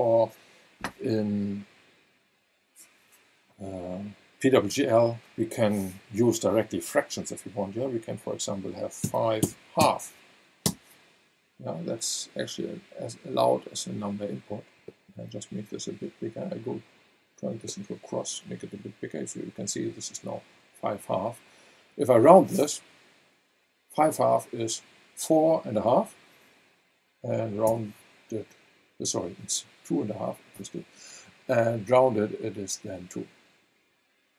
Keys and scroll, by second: 9.0 KP_5, 9.8 KP_2, 10.6 Return, 27.6 v.